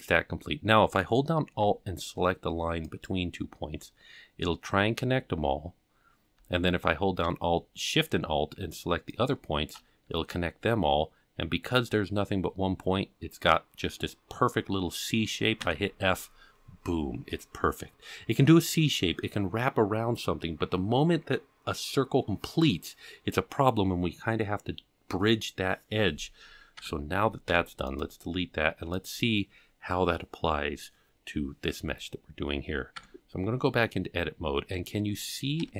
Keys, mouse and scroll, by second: 2.8 alt+click, 9.1 alt+shift+click, 10.7 scroll down 1, 11.6-12.0 scroll up 2, 13.6-13.9 scroll down 2, 15.6 f, 26.8 Tab, 27.5 x, 29.0 click, 33.0 Tab, 35.6 KP_7.